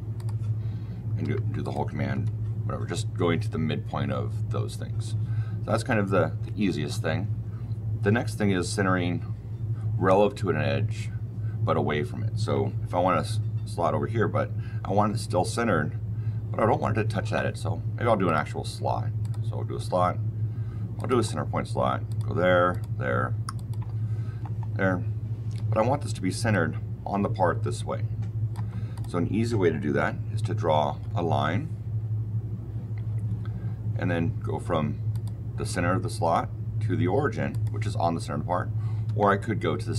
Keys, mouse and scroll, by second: 0.1 click, 1.1 Escape, 1.5 click, 2.0 Delete, 18.2 click, 19.1 click, 20.9 click, 22.0 click, 22.6 click, 23.5 click, 24.4-25.6 scroll, 25.6 Escape, 26.4 click, 28.8 click, 30.8 l, 35.0 click, 37.4 click, 39.0 Escape.